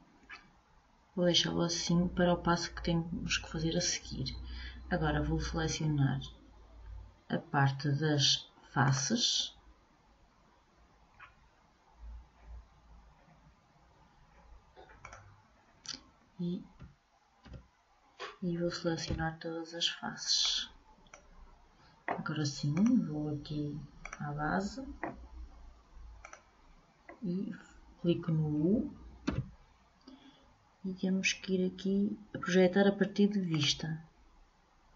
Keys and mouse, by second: 9.0-10.8 drag, 15.3-17.4 drag, 16.9 a, 17.6 a, 19.2 b, 24.2 click, 26.4-28.2 drag, 29.4 u.